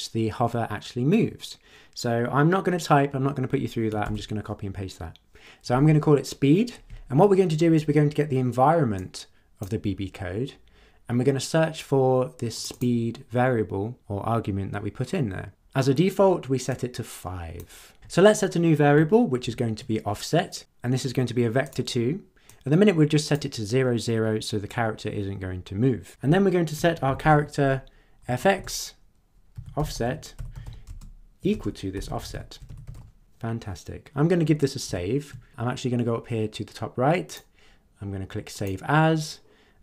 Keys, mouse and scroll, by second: 4.0 ctrl+v, 8.9-9.8 drag, 12.5 click, 16.7-17.7 drag, 19.4 ctrl+z, 21.7 click, 22.4-23.5 drag, 26.7 Return, 26.8-27.8 typing, 28.2 Down, 28.5 Return, 29.3-33.4 typing, 34.8 ctrl+s, 37.2 click, 38.5 click.